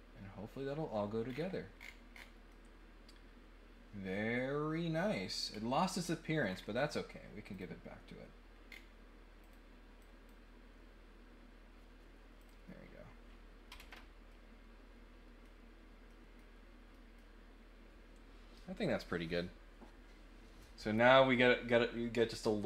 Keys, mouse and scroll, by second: 1.2 scroll up 1, 1.7-2.2 scroll down 2, 2.4-5.3 middle drag, 5.5 scroll down 1, 5.7-6.6 scroll up 3, 7.5 click, 8.7 scroll down 1, 9.4 click, 10.0 click, 12.4 click, 14.3-15.4 middle drag, 16.0 middle click, 16.9 middle click.